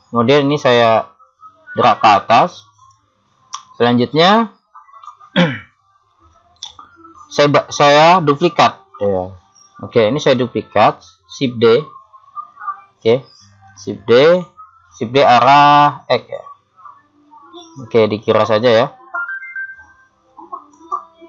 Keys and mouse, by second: 0.7 click, 3.8-6.5 middle drag, 6.7 KP_7, 13.7 shift+d.